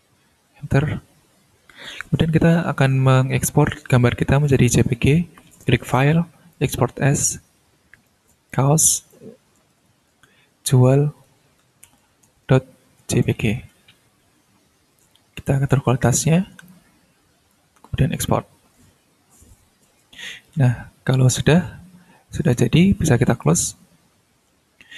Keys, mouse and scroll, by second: 5.5 click, 6.5 click, 8.0 click, 9.6 BackSpace, 10.1 -, 11.2-13.8 typing, 15.4-15.9 drag, 16.6-17.7 drag, 18.1 click, 23.3 click.